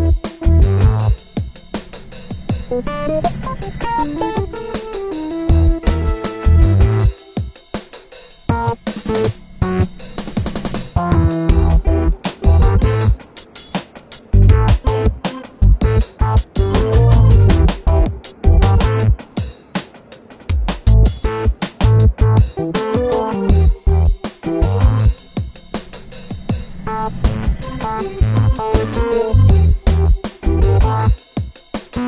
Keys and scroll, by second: 0.2 g, 1.7-2.7 typing, 4.3 [, 6.6 v, 6.9 super+t, 8.8 Return, 14.1 Return, 16.2 super+=.